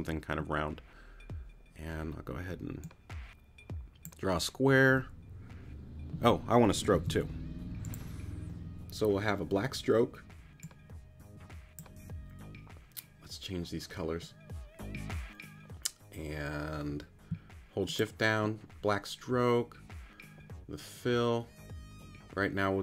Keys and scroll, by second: 8.0 super+z.